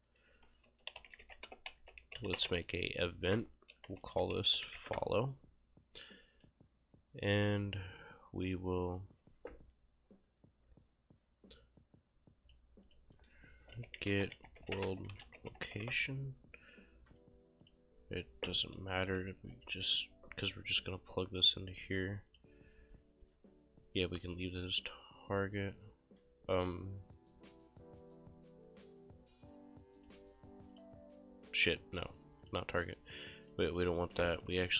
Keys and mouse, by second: 0.1 right click, 0.5-5.3 typing, 9.0 click, 12.9 click, 13.2 right click, 13.6-16.4 typing, 17.7 click, 19.5 Delete, 19.9 click, 22.3 click, 24.0 right click, 24.8 click, 25.5 right click, 30.7 click, 32.5 click, 33.2 right click, 33.7 click.